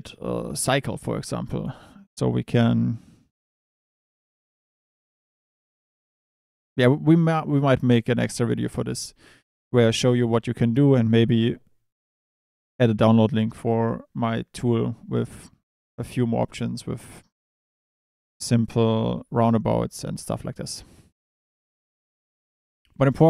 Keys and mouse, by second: 12.5 click, 13.8 click, 14.6 Tab, 15.2 Tab, 15.8 Tab, 16.4 click, 21.5 click, 22.0 Tab, 22.4 Tab.